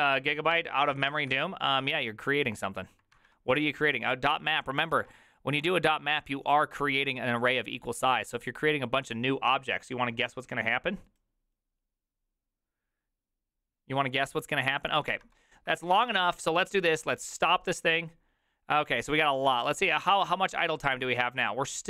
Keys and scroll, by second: 3.2 alt+{, 5.0 alt+{, 15.9 alt++, 15.9 alt+[.